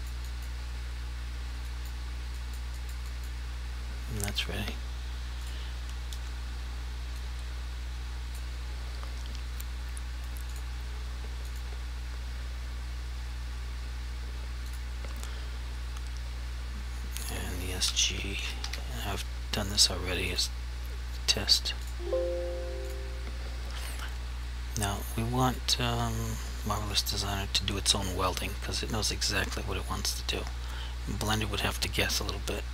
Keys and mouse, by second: 0.1 click, 0.4 click, 0.9 double click, 1.8 click, 2.5 click, 2.9 click, 3.2 click, 3.5 double click, 5.5 click, 7.4 click, 10.6 click, 14.8 click, 18.2-18.7 typing, 20.4 click, 23.4 click, 29.1 click.